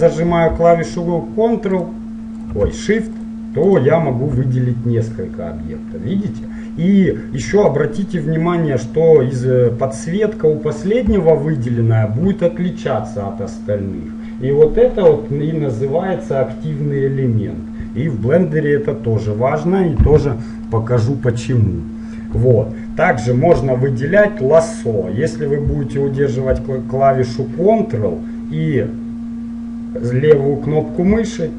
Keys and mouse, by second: 1.0-6.5 right drag, 6.5-11.1 middle drag, 11.7-13.5 right drag, 20.9-22.6 middle drag, 22.8-24.7 middle drag, 27.5-29.3 drag.